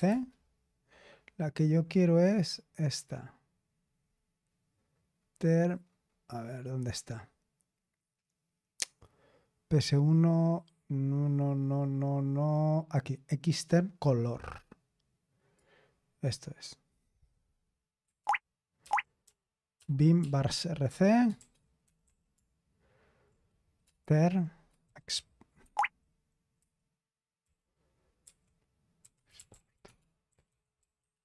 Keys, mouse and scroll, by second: 0.0-0.4 typing, 1.8 scroll up 1, 5.1-6.0 scroll up 1, 6.0-6.9 scroll up 1, 11.0-12.5 scroll up 1, 12.5-13.2 scroll up 1, 15.5-16.7 drag, 18.3 ctrl+o, 18.8 ctrl+o, 19.2 ctrl+p, 19.7 ctrl+p, 20.2 ctrl+p, 20.8 Return, 21.1-22.5 typing, 24.8 typing, 25.6 Escape, 29.0-31.2 typing.